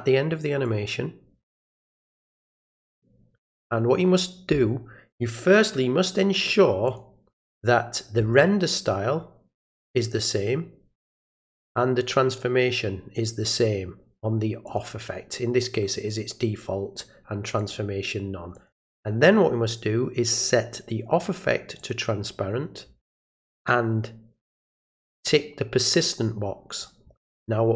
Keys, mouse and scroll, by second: 0.6-2.6 drag, 3.5 click, 6.9 click, 14.7 click, 17.6 click, 18.5 click, 21.8 click, 25.0 click.